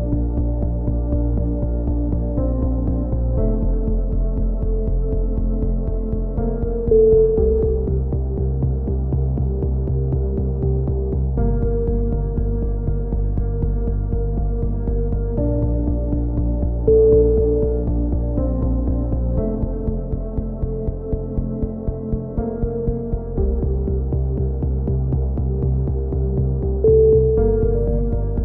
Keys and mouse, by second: 0.3 middle click, 2.2 a, 2.4 z, 2.6 z, 3.1-3.7 drag, 4.7 c, 6.7 click, 6.7 right click, 9.3-9.9 right drag, 9.3 c, 9.3 a, 9.5 z, 9.7 click, 9.7-10.3 middle drag, 16.1 shift+d, 16.4 ctrl+KP_1, 16.7 z, 16.8-17.4 drag, 17.9-20.6 drag, 20.8-21.3 drag, 21.8 e, 22.2-22.7 drag, 22.7 s, 23.5-24.7 drag, 24.7 a, 24.8 z, 24.9-26.2 middle drag, 26.8-27.4 middle drag, 27.4 click, 27.6 z, 28.2 z, 28.3-28.4 middle drag.